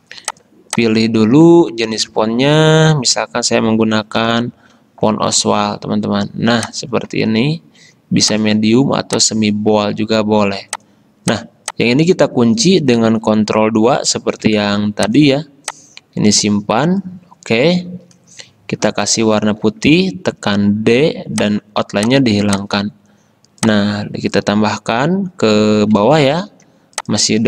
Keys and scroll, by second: 4.1-5.2 typing, 14.6 ctrl+2, 20.2 d, 26.5 t.